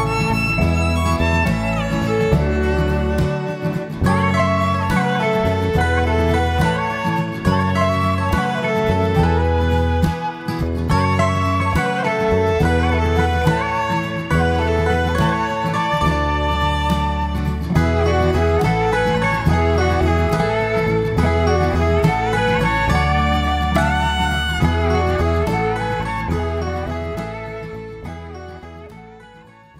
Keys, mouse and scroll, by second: 1.4 KP_7, 1.8-2.1 scroll up 5, 2.1 ctrl+z, 2.8 shift+z, 3.2 shift+middle click, 3.9 e, 7.5 middle click, 7.9-8.5 scroll down 4, 8.1 Tab, 8.4 middle click, 8.8-9.4 scroll up 3, 9.0 middle click, 11.2 Tab, 11.7 shift+z, 11.9 middle click, 15.6 scroll down 1, 15.8 middle click, 17.4 KP_7, 18.6 Tab, 19.0 Tab, 19.8 click, 20.1 click, 22.7 click, 24.3 click, 24.6 middle click, 26.0 click, 26.5 middle click, 27.2 click, 27.4 click, 28.0 click, 28.3 click, 29.0 click, 29.3 click, 29.7 click.